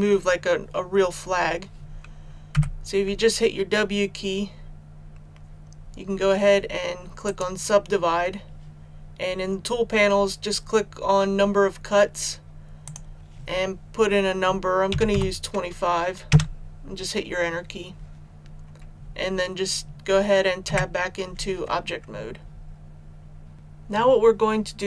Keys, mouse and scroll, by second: 2.5 w, 7.2-13.8 drag, 14.8 KP_2, 15.0 KP_5, 20.6 Tab, 23.5 click.